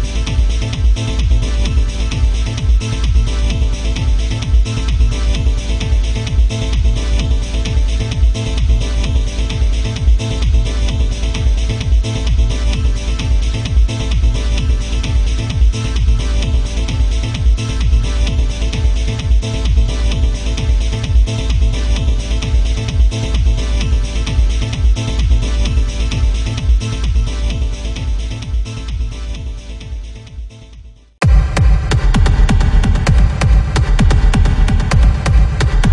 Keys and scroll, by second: 23.2 ctrl+z, 35.1 ctrl+z.